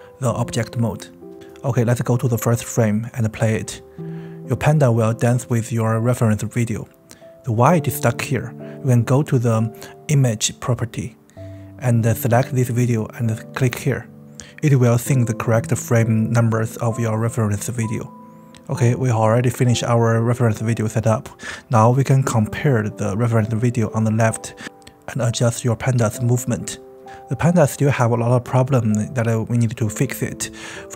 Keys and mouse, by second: 0.2 g, 1.2 click, 2.1 space, 5.1 s, 7.0 space, 9.1 click, 13.0 click, 15.5 click, 16.0 space.